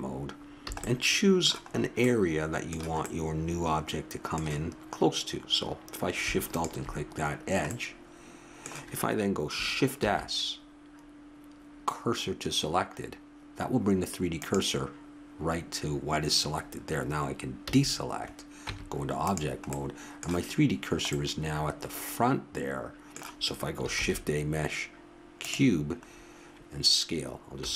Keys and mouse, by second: 0.7 a, 5.0-6.4 middle drag, 6.6-8.4 middle drag, 10.0 shift+s, 17.7 a, 18.7 Tab, 19.7-22.2 drag, 23.9 shift+a, 27.6 s.